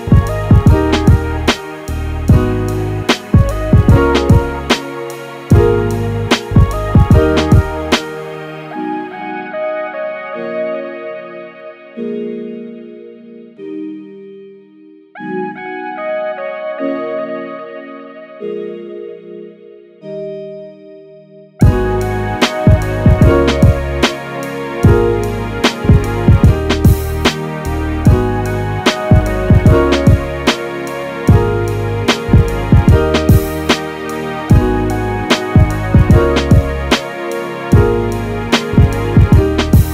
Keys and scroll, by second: 22.9 typing.